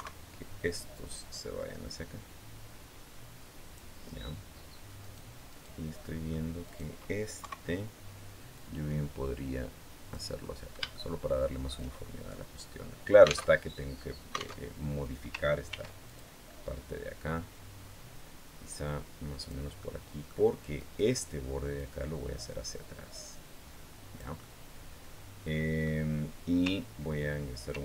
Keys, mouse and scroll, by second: 0.9-3.8 drag, 4.8 right click, 5.3 right click, 5.8 middle click, 6.4 right click, 7.2 KP_3, 8.4-10.1 drag, 10.7 shift+middle click, 13.2 alt+Tab, 14.4 alt+Tab, 15.4 ctrl+r, 15.8 ctrl+click, 19.2 click, 19.6 middle click, 20.6 right click, 21.6-24.2 drag, 24.2-25.8 middle drag, 27.5 ctrl+r.